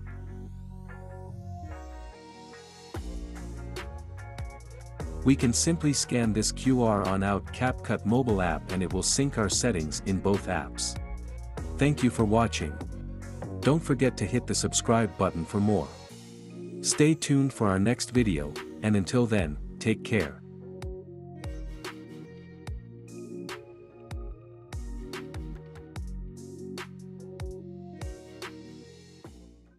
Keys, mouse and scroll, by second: 4.4-5.4 drag, 16.6-17.6 drag, 18.1 click.